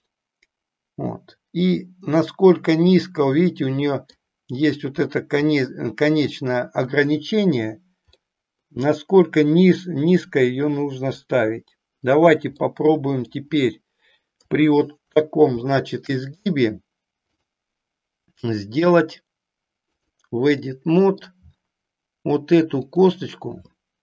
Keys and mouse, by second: 8.2-11.2 middle drag, 12.6 middle click, 14.4 KP_3, 15.6 shift+middle click, 17.4-20.1 drag, 20.7 middle click, 22.9 click.